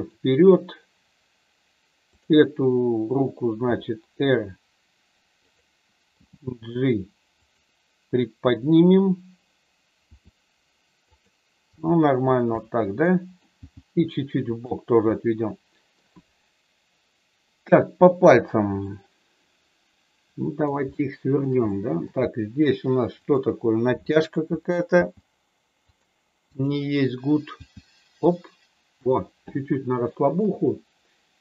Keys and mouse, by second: 2.0 click, 3.6 r, 5.4 click, 6.0 g, 7.4 click, 10.0 r, 11.7 g, 12.3 click, 12.6 middle click, 13.5 g, 14.5 click, 15.0 middle click, 18.8-20.6 middle drag, 20.9 shift+middle click, 21.6 middle click, 24.9 g, 25.8 click, 27.5 g, 29.1 click, 30.2 shift+middle click.